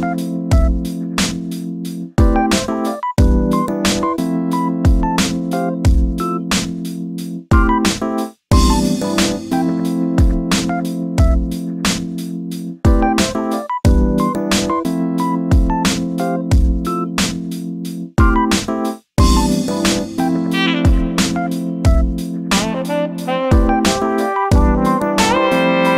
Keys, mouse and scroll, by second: 1.6-2.9 scroll up 1, 2.9 alt+shift+click, 3.7 alt+shift+click, 4.3 shift+middle click, 5.3 alt+shift+click, 5.8-7.2 middle drag, 7.2 e, 9.1 middle click, 9.5 f, 9.8 middle click, 12.0 middle click, 12.4 3, 15.5 middle click, 15.7-16.7 scroll down 4, 16.7 z, 17.0 shift+middle click, 17.2 scroll up 4, 17.4 shift+middle click, 17.9 scroll up 1, 18.1 middle click, 18.9 Tab, 19.2 scroll down 3, 19.4-20.5 middle drag, 20.5 KP_7, 21.2-22.4 middle drag, 22.4 click, 22.7-25.9 middle drag.